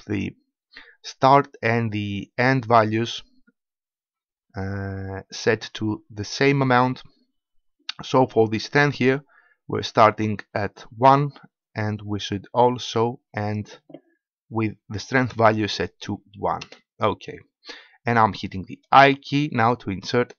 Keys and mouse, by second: 15.0-19.0 drag, 19.0 i.